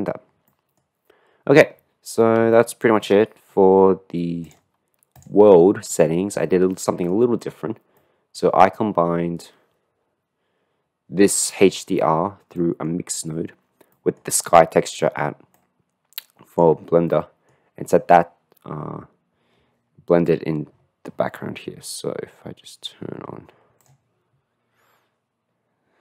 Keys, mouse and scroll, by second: 2.7 shift+middle click, 4.6 click, 6.0-7.2 middle drag, 8.0 middle click, 11.5 middle click, 12.6 middle click, 14.0 middle click, 15.6 click, 16.0 middle click, 17.1 middle click.